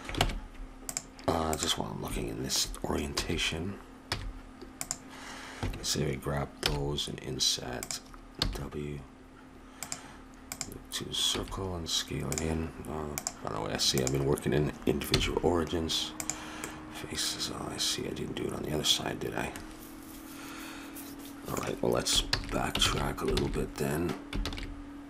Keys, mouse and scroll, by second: 0.2 ctrl+Tab, 1.5 right click, 3.2 a, 4.1 c, 6.6 i, 8.4 w, 11.3 s, 13.1-15.1 drag, 15.1 x, 16.6 middle click, 17.6-19.4 middle drag, 22.2 ctrl+z, 22.8 ctrl+z, 23.3 ctrl+z, 24.5 ctrl+z.